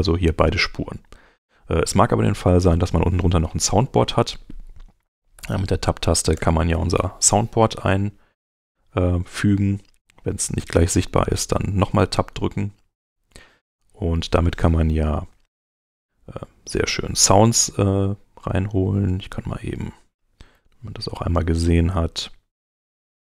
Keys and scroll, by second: 5.4 Tab, 6.3 Return, 11.0 Tab, 20.5 super+Up.